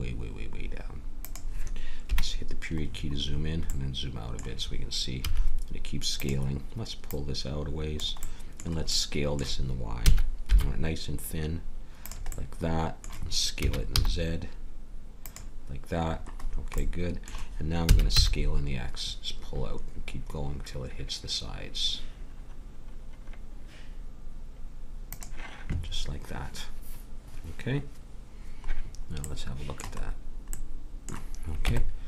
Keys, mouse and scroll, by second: 2.0 KP_Decimal, 5.2 s, 7.1-8.8 drag, 8.8-10.0 middle drag, 10.0 s, 13.5 s, 16.1 middle click, 16.8-20.1 middle drag, 17.9 s, 29.2-30.6 middle drag, 31.6 Tab.